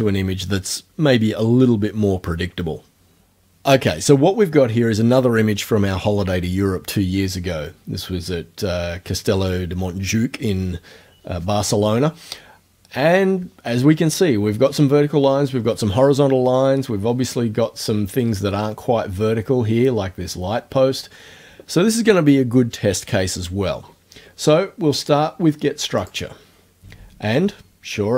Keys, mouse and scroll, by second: 26.1 click.